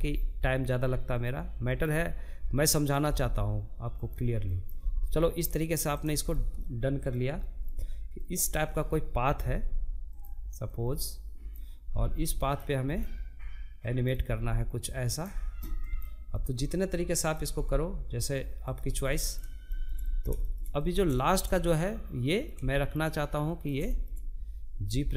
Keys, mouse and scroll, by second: 0.2 click, 1.3 click, 1.5 g, 3.1 click, 3.2 g, 4.7-5.0 scroll down 2, 5.0-6.8 middle drag, 6.8 click, 7.9 g, 9.9 click, 10.3 g, 11.4 click, 12.5 click, 12.7 g, 14.4 click, 14.8-15.9 middle drag, 15.9 g, 17.3 scroll down 1, 17.5-19.4 middle drag, 19.4 click, 19.6-22.1 shift+middle drag, 22.1 click, 22.3-23.4 shift+middle drag, 23.4 g.